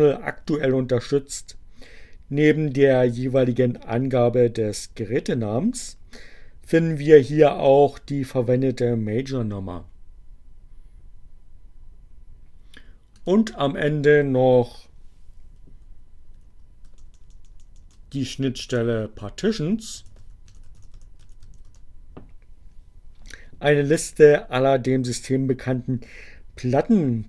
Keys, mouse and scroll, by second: 12.0 click, 14.1 Up, 16.6 BackSpace, 18.1 p, 19.1-21.6 typing.